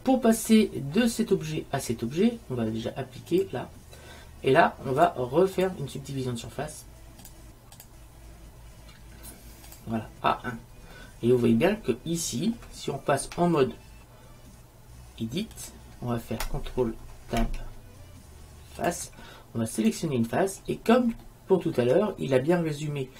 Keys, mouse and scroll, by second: 3.4-9.9 drag, 11.1 middle click, 13.4 Tab, 17.5 ctrl+Tab, 19.9-21.6 right drag, 21.4 click, 21.6-23.1 middle drag.